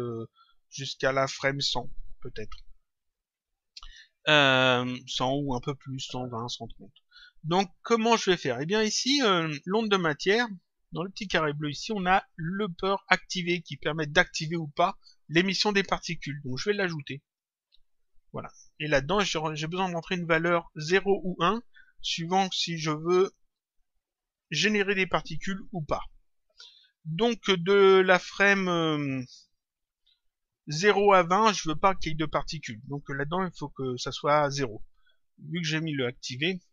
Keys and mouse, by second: 8.1 click, 11.5 click, 17.2 click, 19.2 click.